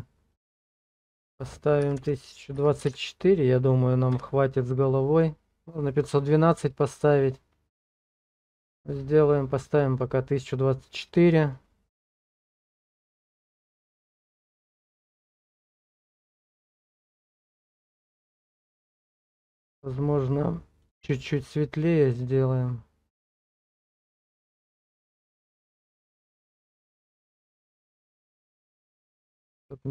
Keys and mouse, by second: 0.4-4.2 drag, 12.0 middle click, 13.6 shift+click, 14.9 click, 16.5 shift+click, 17.0 click, 20.8 click.